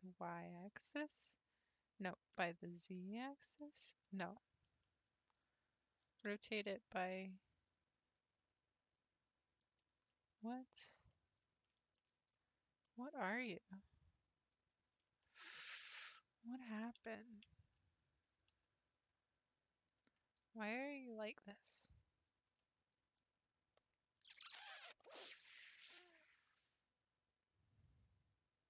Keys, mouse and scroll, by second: 4.4 scroll down 3, 4.7 scroll up 1, 4.8-6.2 middle drag, 6.2 r, 10.1-11.5 middle drag, 11.5-12.0 scroll up 3, 12.0 shift+middle click, 12.4-12.8 scroll up 2, 12.9-14.9 middle drag, 14.9-15.2 scroll up 1, 15.2-17.1 shift+middle drag, 17.1 ctrl+z, 18.5 ctrl+z, 21.2 click, 21.6-22.2 scroll up 1, 22.2-22.5 scroll up 1, 22.6-23.9 middle drag, 23.9-25.0 scroll up 1, 26.7 click.